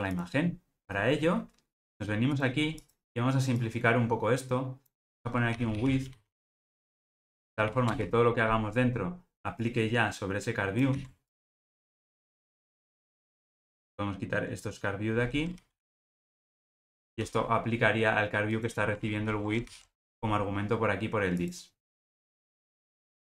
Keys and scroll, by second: 11.0 super+x, 15.7 ctrl+g.